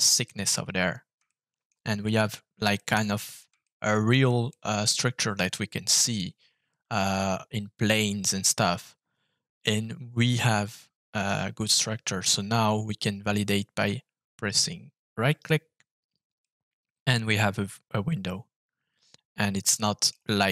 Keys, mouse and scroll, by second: 0.7-1.1 scroll up 3, 1.2-2.5 shift+middle drag, 2.7 middle click, 3.6 shift+middle click, 4.4-6.1 middle drag, 9.7-11.2 middle drag, 11.5-12.6 scroll down 3, 12.6-13.7 scroll down 1, 15.3 right click, 16.3 middle click, 17.3 middle click, 17.9 middle click.